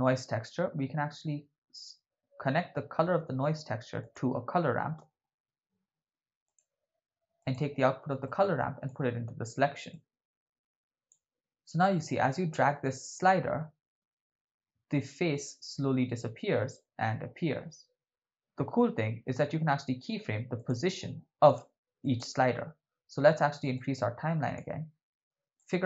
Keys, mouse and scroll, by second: 3.3 shift+a, 8.2-8.9 drag, 9.9-11.2 drag, 12.3-18.4 drag, 20.6 click, 22.1 click, 23.7 click, 25.6 middle click.